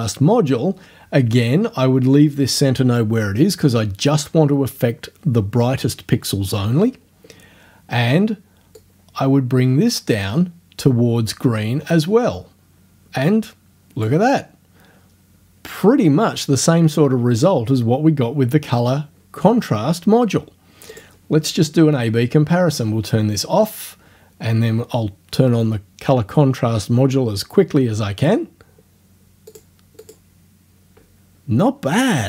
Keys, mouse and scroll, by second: 8.8-14.2 drag, 20.9 click, 29.5 click, 30.0 click.